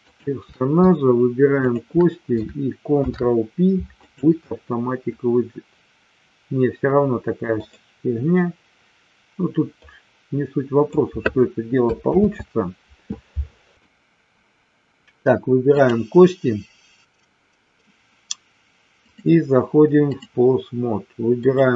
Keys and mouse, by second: 1.6 shift+click, 2.8 ctrl+p, 9.7-10.8 drag, 12.2 ctrl+z, 13.8 click, 15.6 click, 19.1-20.3 drag, 21.3-21.7 drag.